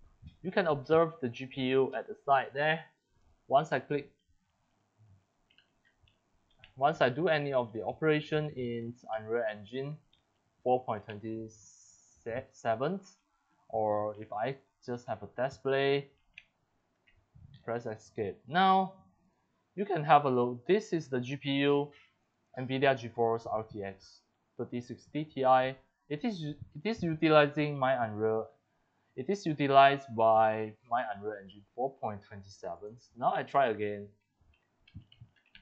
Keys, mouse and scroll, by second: 4.7-6.1 drag, 4.9-11.6 typing, 12.7 click, 13.7 click, 14.3 click, 14.5-17.4 typing, 17.5 Escape, 19.2-24.4 drag, 34.0 scroll down 3, 34.4-35.6 typing, 34.4 right click.